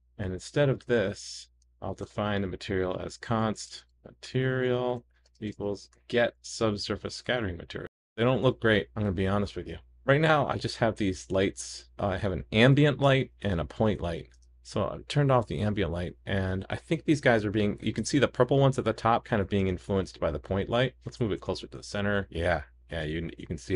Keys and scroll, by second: 1.6 super+/, 5.9 super+v, 7.4 super+s, 14.4 super+/, 14.4 super+s, 21.4 super+s, 23.0 super+s.